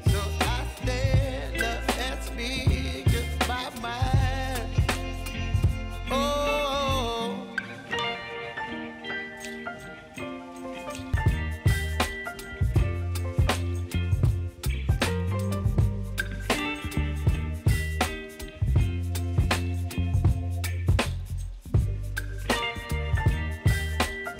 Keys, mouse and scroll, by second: 3.2 p, 3.9 click, 9.0 ctrl+d, 9.4 click, 10.7 s, 11.5-14.7 drag, 14.7-15.3 alt+scroll up 1, 15.6-17.9 drag, 17.9 Up, 19.3-19.8 scroll down 1, 19.8 click, 20.4 ctrl+d, 20.9-22.6 drag, 22.6 s, 23.9-24.3 drag.